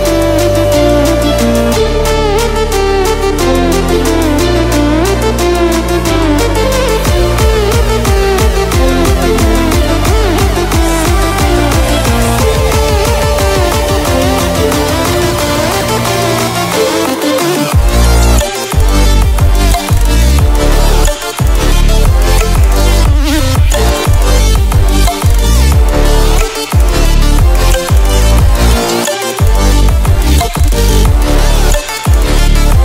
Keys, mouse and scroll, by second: 0.4-1.3 drag, 1.9 right click, 4.8 click, 13.3-18.4 drag, 15.1-16.1 click, 18.4 ctrl+w, 25.8 ctrl+w, 26.9 click, 28.0 Down, 30.2 click, 30.5 Down.